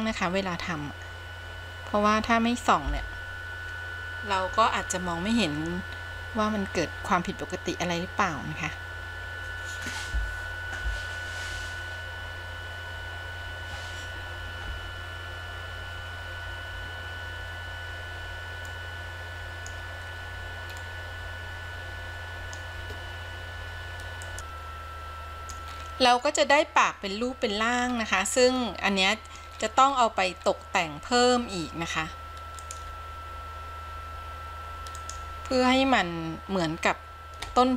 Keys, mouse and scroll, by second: 17.1 click, 18.8-19.8 middle drag, 20.2 scroll down 2, 20.9-22.7 middle drag, 24.4-25.8 middle drag, 25.9-26.5 scroll up 2, 26.5 middle click, 27.4-28.6 scroll down 11, 28.8 middle click, 29.7-31.1 scroll up 8, 32.7 click, 35.9 click.